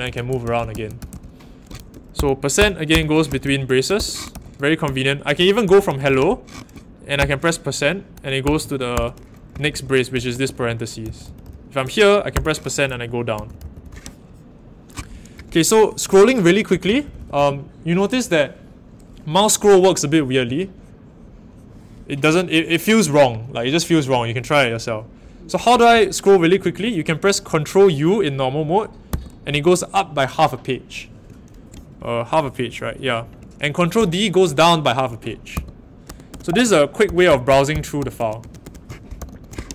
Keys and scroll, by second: 0.0-6.0 typing, 7.2 shift+5, 8.4-14.2 typing, 16.8-17.1 typing, 25.7-26.4 typing, 29.0 ctrl+u, 33.9 ctrl+d, 35.5 ctrl+u, 36.0 ctrl+d, 37.0 ctrl+u, 38.0 ctrl+d, 39.2 ctrl+u.